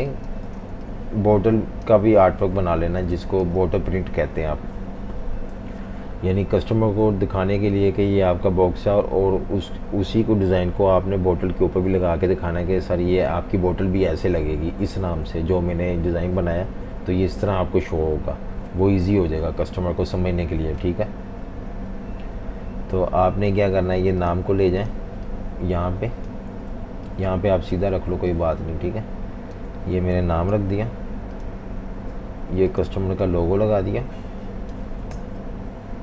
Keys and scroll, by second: 0.0-1.1 typing, 2.7-3.1 typing, 5.3 F18, 21.7 F19, 30.5 super+g, 35.1 shift+super+].